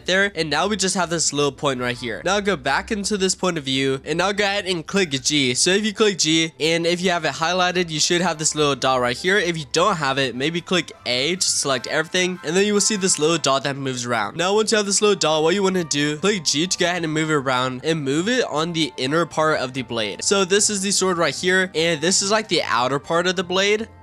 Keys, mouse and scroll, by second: 0.3-2.6 scroll up 3, 2.9 click, 4.0-4.6 scroll down 3, 4.6 g, 7.9-8.5 scroll up 7, 8.5-9.6 scroll down 5, 9.6 ctrl+z, 11.2 a, 12.4 g, 14.3 ctrl+z, 14.6 g, 20.1-21.1 scroll down 4, 21.1-21.7 scroll up 5, 21.7-24.0 shift+middle drag.